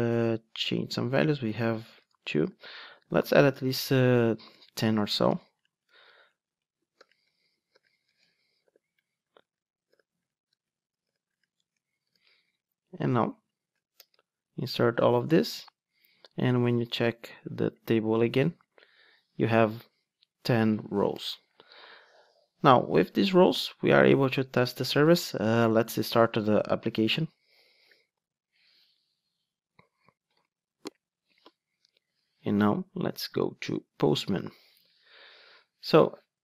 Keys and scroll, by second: 2.5 super+d, 14.0 super+Return, 18.6 super+r, 26.9 ctrl+d.